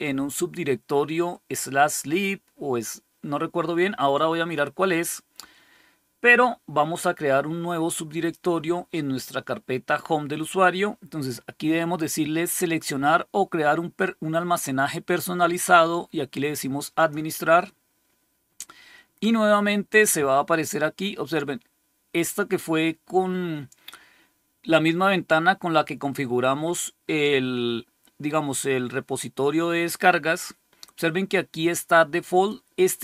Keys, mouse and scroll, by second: 12.3 click, 16.9 click, 32.2 click.